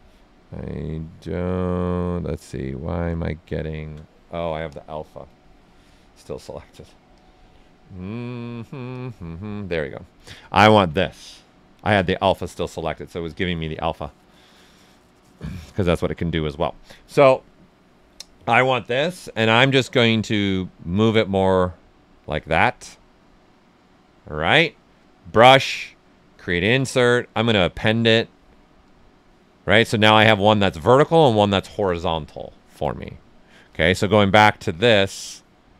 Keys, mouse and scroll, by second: 0.0-1.4 right drag, 1.4-3.4 drag, 3.4 shift+f, 4.6 click, 9.9 right click, 11.7 shift+f, 20.1 w, 20.9-22.6 shift+drag, 22.6 q, 25.2 b, 29.1 click, 33.9 click, 34.6-35.7 right drag.